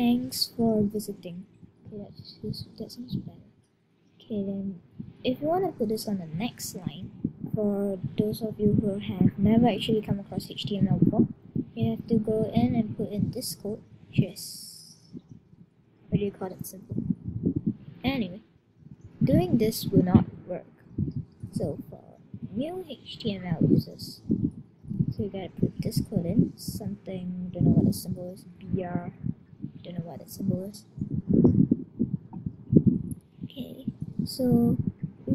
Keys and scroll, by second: 5.7 Left, 17.6 Return, 24.7 shift+<, 26.0 shift+..